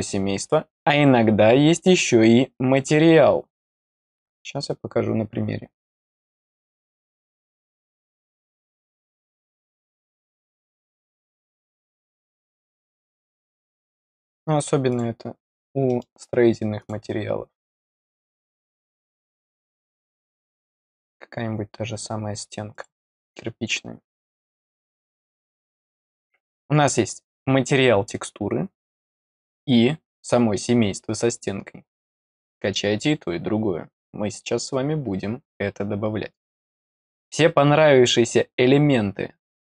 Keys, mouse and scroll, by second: 2.7 click, 3.7 click, 7.0-7.5 scroll down 2, 8.2 click, 10.2 click, 11.7 click, 12.5 click, 14.8 click, 15.8 middle click, 16.7 click, 18.4-18.8 scroll down 1, 19.0-19.7 scroll down 2, 22.6 click, 25.2 click, 36.7 click.